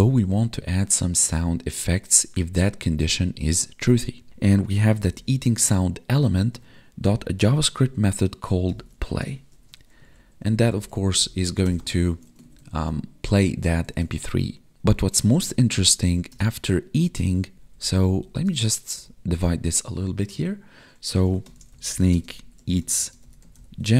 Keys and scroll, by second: 6.0 Tab, 10.0 Right, 10.4 Left, 12.1 ctrl+s, 12.4 ctrl+Right, 13.9 ctrl+s, 15.2 ctrl+Left, 17.5 Up, 18.9 Up, 22.1 space, 23.0 space.